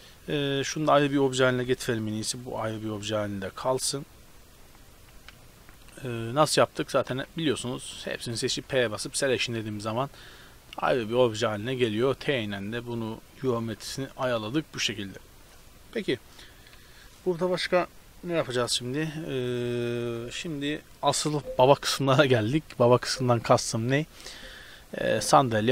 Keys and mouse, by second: 0.2 g, 1.7 p, 2.2 Tab, 2.5 right click, 2.9 Tab, 3.9-4.7 middle drag, 5.2 t, 5.8 Tab, 7.1 a, 8.6 p, 9.8 Tab, 10.8 g, 11.6 t, 12.5-14.0 drag, 14.0 t, 14.3 click, 15.0 z, 16.8 z, 20.0 z, 22.7 middle drag, 23.9 z.